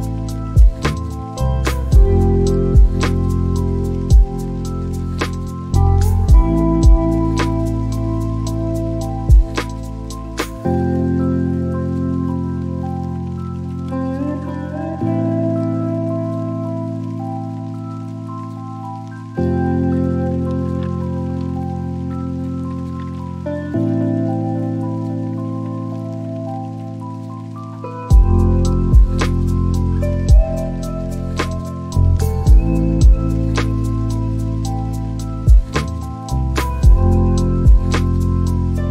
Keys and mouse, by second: 4.3 g, 4.9 z, 9.3 click, 15.5 Tab, 16.8 BackSpace, 20.5-22.8 typing, 24.0-26.0 BackSpace, 26.6 shift+c, 27.2 l, 28.0 r, 29.5-33.3 typing, 38.4 click.